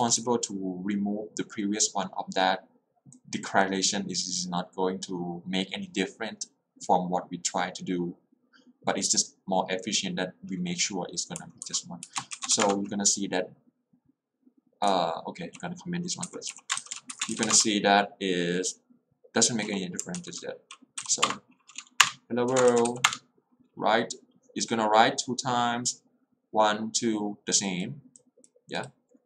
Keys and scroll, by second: 11.5 j, 12.1 Escape, 12.6 Return, 15.0 j, 16.3 0, 16.7 i, 17.2 Escape, 17.6 Return, 20.3 alt+l, 21.1 Up, 21.2 Return, 22.9 w, 23.1 Return.